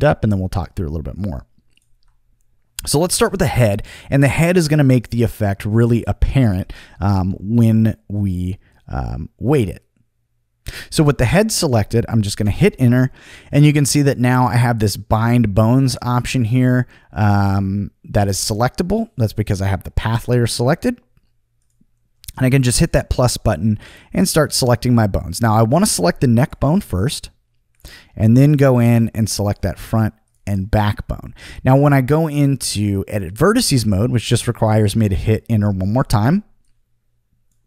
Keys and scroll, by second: 12.4 Return, 35.4 Return.